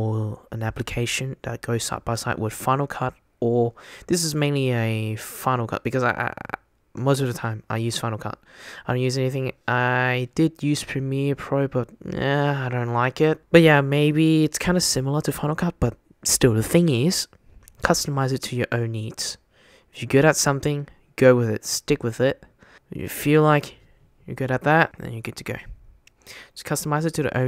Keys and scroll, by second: 23.0 super+x.